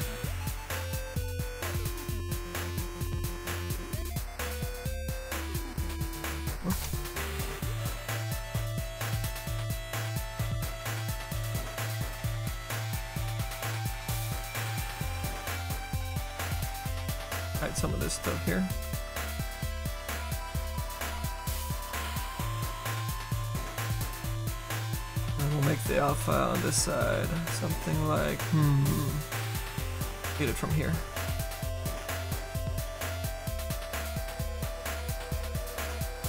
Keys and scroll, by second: 1.1 s, 1.6 s, 6.5 ctrl+z, 14.9 s.